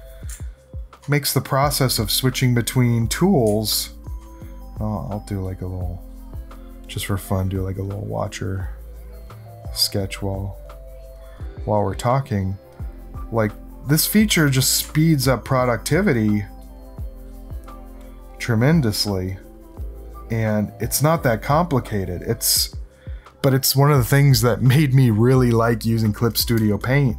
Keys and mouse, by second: 0.4 ctrl+alt+click, 1.4 click, 2.1 click, 2.3 click, 2.9 click, 3.6 ctrl+alt+click, 4.6-6.3 drag, 6.5 click, 8.0-9.6 drag, 10.3 click, 11.8 click, 13.9 click, 14.9 ctrl+alt+click, 15.9 click, 16.8 click, 17.3 click, 18.5-21.0 drag, 21.8 click, 26.8-27.1 drag.